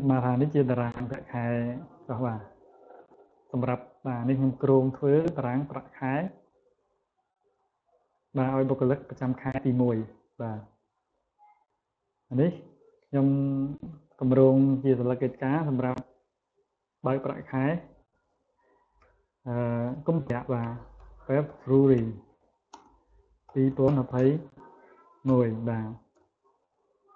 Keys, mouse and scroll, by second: 0.6-1.4 scroll down 4, 1.4 scroll down 1, 1.9 scroll up 2, 5.4 click, 5.7 click, 6.2 click, 6.6 click, 7.1 click, 7.4 click, 7.8 click, 8.9 click, 9.9 click, 11.7 click, 12.7 right click, 13.8 click, 18.8 shift+f, 20.1-23.3 typing, 25.1 1.